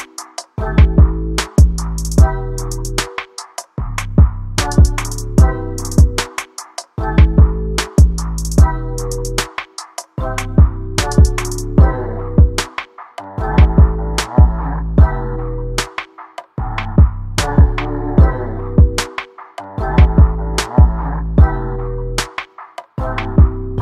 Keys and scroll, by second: 5.5 ctrl+t, 15.7 ctrl+a.